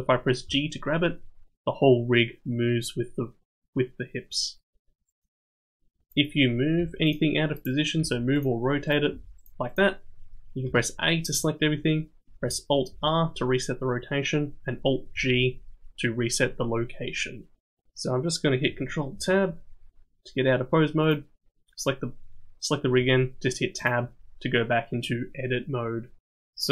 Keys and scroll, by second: 0.5 g, 6.8 g, 8.0 r, 9.1 r, 10.6 a, 12.9 alt+r, 15.2 alt+g, 19.1 ctrl+Tab, 23.0 Tab.